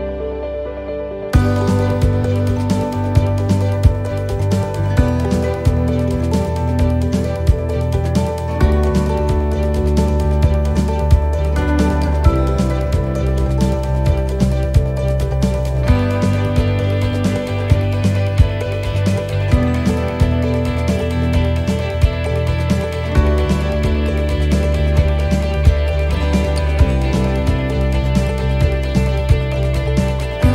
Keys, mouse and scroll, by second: 6.2 scroll up 2, 7.1 click, 9.2 1, 11.0 shift+middle click, 11.5 scroll up 2, 12.1 shift+middle click, 12.3-12.8 shift+scroll down 3, 18.8 scroll up 2, 20.4 click, 21.8 scroll down 4, 22.3 shift+middle click, 24.4 scroll up 1, 25.0 shift+middle click, 25.0-25.4 scroll up 3, 29.1 scroll down 3.